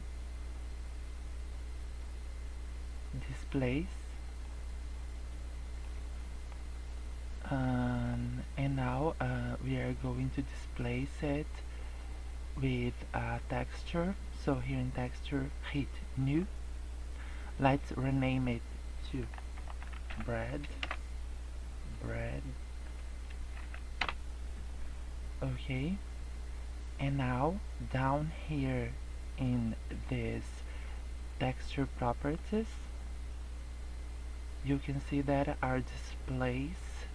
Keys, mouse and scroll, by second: 4.9 middle click, 5.9 scroll down 3, 6.1 middle click, 6.5 scroll up 3, 6.8 middle click, 7.7 middle click, 16.1 click, 17.7 click, 21.9 click, 27.3-28.1 scroll down 3, 32.4 click.